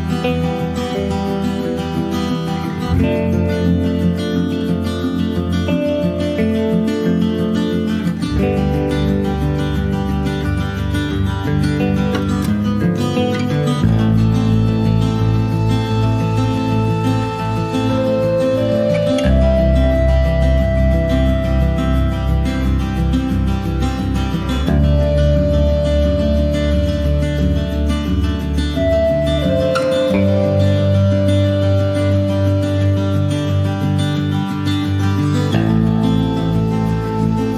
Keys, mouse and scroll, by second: 1.2-2.7 drag, 4.6 middle click, 4.6-5.0 scroll down 1, 5.6 click, 5.8-7.3 shift+middle drag, 7.3 click, 8.0 g, 9.6 click, 10.0 shift+middle click, 10.2 scroll up 1, 10.5 click, 11.1 click, 13.8 click, 14.2-16.5 middle drag, 16.5-24.3 drag, 24.3 scroll down 2, 25.0 click, 25.4-25.8 scroll up 1, 27.5-30.4 drag, 30.4 scroll down 1, 33.6 click, 35.7 middle click, 36.6 click, 37.0 shift+middle click.